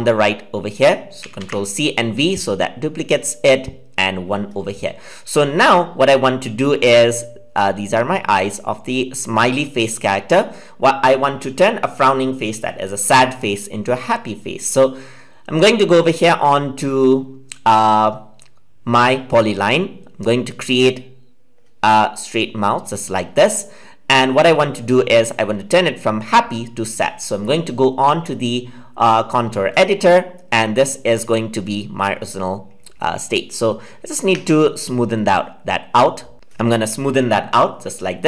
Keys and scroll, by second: 1.1 ctrl+c, 1.3 ctrl+v.